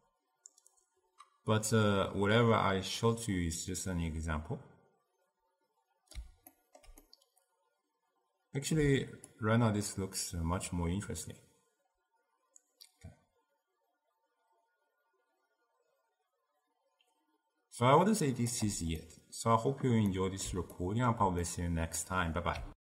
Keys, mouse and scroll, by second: 6.6-9.5 ctrl+middle drag, 9.5-12.5 shift+drag, 19.1-20.7 middle drag, 20.8-22.8 ctrl+middle drag.